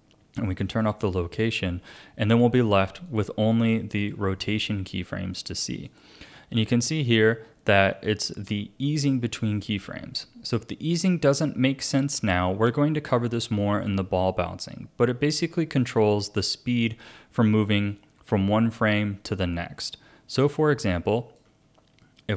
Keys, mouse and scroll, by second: 3.1 click, 3.6 click, 4.0 click, 5.3 click, 5.9 click, 8.0-11.1 drag.